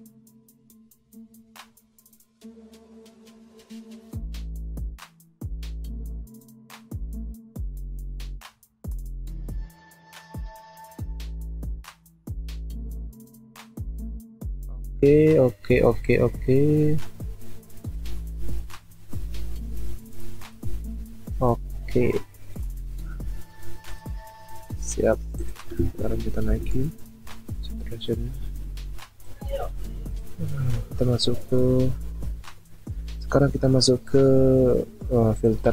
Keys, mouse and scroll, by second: 24.2-24.6 alt+scroll up 1, 25.0-25.8 alt+scroll down 1, 26.5 ctrl+m.